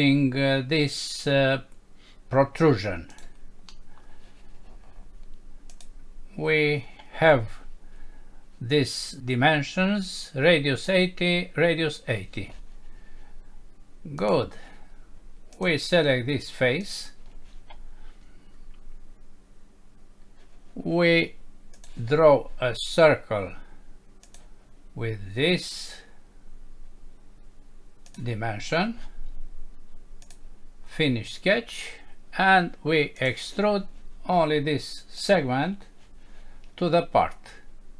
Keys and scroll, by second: 3.7 F6.